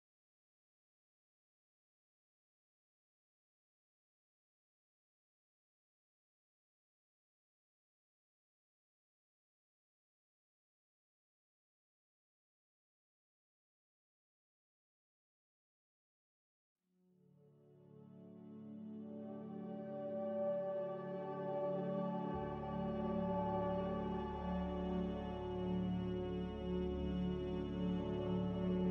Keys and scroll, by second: 0.2 5, 14.2 ctrl+z, 14.8 ctrl+z, 26.8 z.